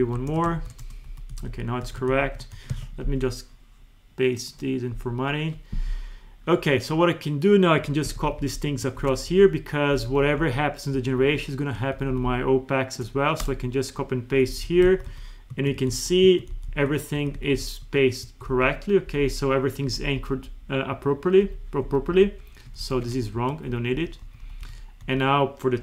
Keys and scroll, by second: 0.0 Up, 0.3 ctrl+c, 0.6 ctrl+shift+Right, 1.1 Left, 1.3 Right, 1.8 Left, 2.1 ctrl+shift+Right, 2.7 alt+2, 8.1 ctrl+c, 8.2 Down, 9.3 Down, 9.9 Up, 10.9 Down, 14.3 Left, 14.5 Right, 14.9 Down, 15.5 F2, 15.8 Escape, 15.9 Right, 16.2 F2, 16.5 Right, 16.7 Escape, 17.2 Down, 17.4 Right, 17.9 F2, 18.3 Escape, 18.5 Right, 19.1 Up, 19.9 Left, 21.9 Left, 22.1 Up, 22.8 ctrl+shift+Right, 23.3 Delete, 23.5 Left, 24.0 Right, 24.2 Down, 24.7 Right, 25.0 Down.